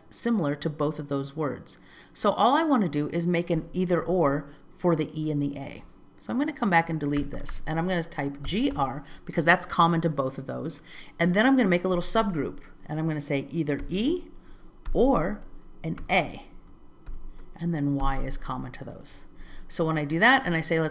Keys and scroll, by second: 4.2 alt+z, 19.4 alt+z.